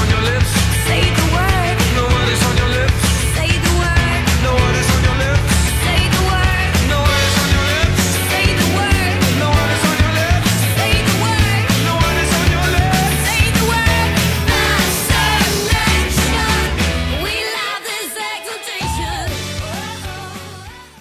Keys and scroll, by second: 4.1 super+d.